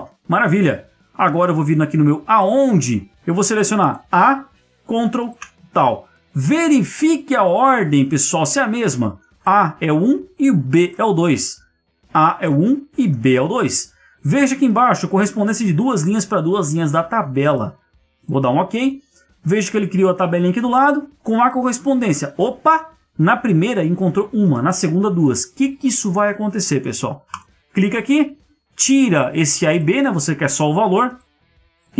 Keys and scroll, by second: 0.0 Escape, 6.7 ctrl+1, 16.5 Escape.